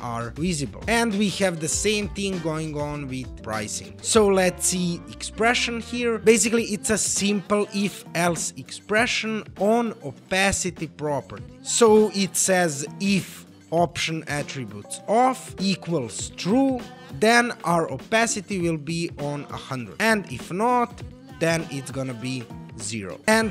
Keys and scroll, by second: 4.7 e.